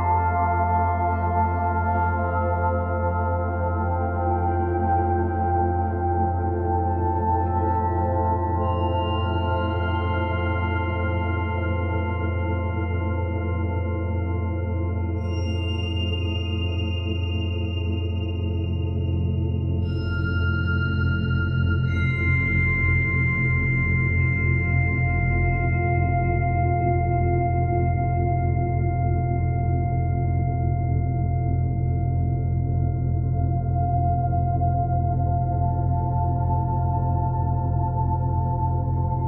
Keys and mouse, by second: 0.6 click, 1.3 click, 4.2 click, 5.9-6.3 typing, 9.5 alt+click, 10.7 typing, 12.1-13.0 typing, 14.7 click, 16.9 click, 18.4 click, 19.2-20.3 drag, 21.6 click, 21.8 click, 24.9 click, 27.1 click, 28.3-36.4 drag, 32.6 1, 36.4 typing, 37.6-39.2 drag.